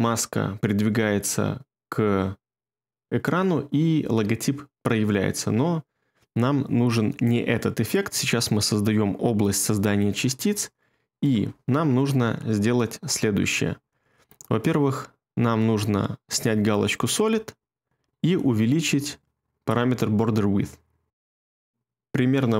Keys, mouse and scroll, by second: 21.7 ctrl+middle click.